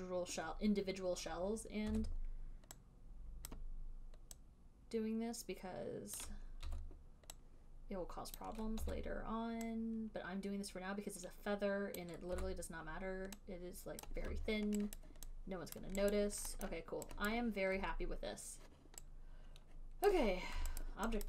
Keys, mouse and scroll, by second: 2.2 r, 3.8 click, 6.5 click, 7.0 w, 8.7 click, 9.1 r, 12.2 click, 12.6 w, 14.3 click, 15.3 alt+right click, 16.1 alt+right click, 16.5 alt+right click, 17.0 alt+middle click, 17.6 alt+click, 20.4 right click, 21.1 alt+right click.